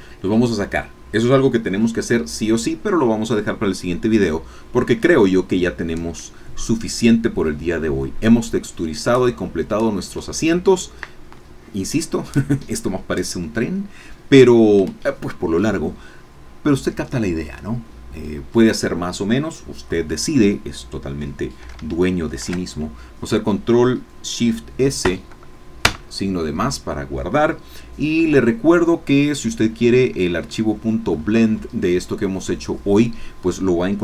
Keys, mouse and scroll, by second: 3.1 scroll down 2, 22.4 ctrl+shift+s, 25.1 KP_Add, 25.8 KP_Enter, 28.8 Caps_Lock, 30.5 shift+middle click.